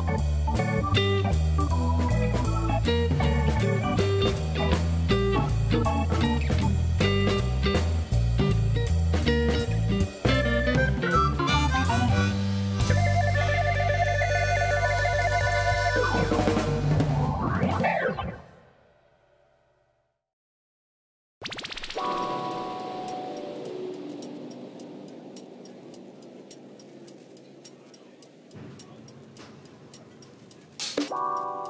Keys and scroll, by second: 1.3 Tab, 4.0 3, 5.0 ctrl+b, 16.1 Tab, 18.0 Tab.